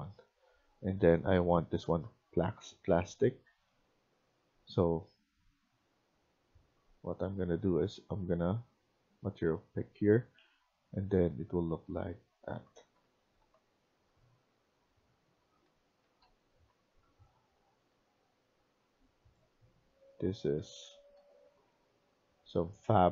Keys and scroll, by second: 12.1-14.5 typing, 15.6-17.0 typing, 19.5-23.1 typing.